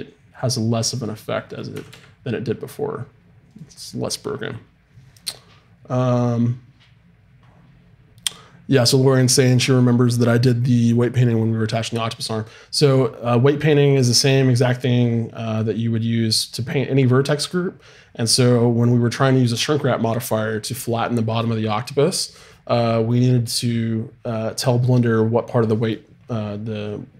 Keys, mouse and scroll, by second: 1.5-3.5 right drag, 1.7 r, 15.4-19.0 right drag.